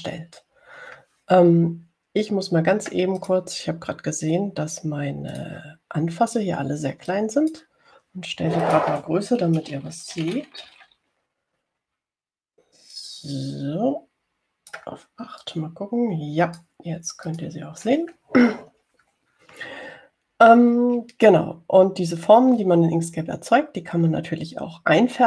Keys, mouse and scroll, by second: 0.2-0.9 ctrl+scroll down 4, 4.5 click, 6.6 click, 8.4 click, 10.0 click, 11.2-12.5 typing, 13.8-16.2 drag, 16.7-18.2 drag, 18.6 click.